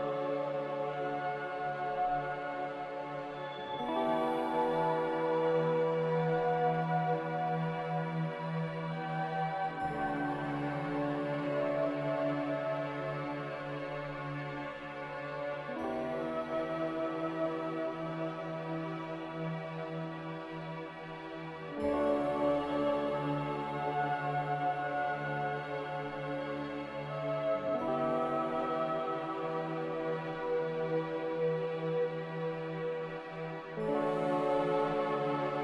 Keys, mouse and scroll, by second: 0.5 m, 13.1 Escape, 28.0 Escape, 28.2 Escape.